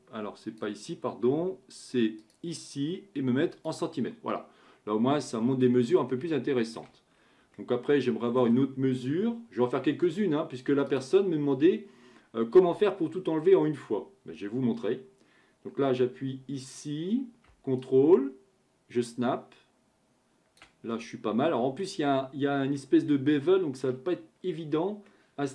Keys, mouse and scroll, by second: 2.2-4.3 drag, 4.3-6.0 middle drag, 6.0-6.3 scroll down 2, 6.3-7.1 shift+middle drag, 7.1 scroll up 5, 7.6-10.7 shift+middle drag, 10.9-14.0 drag, 17.8-20.8 ctrl+drag, 20.9-22.1 middle drag, 22.1-22.7 scroll up 4, 22.7-24.1 shift+middle drag, 24.1-25.0 scroll up 1, 25.0-25.5 middle drag.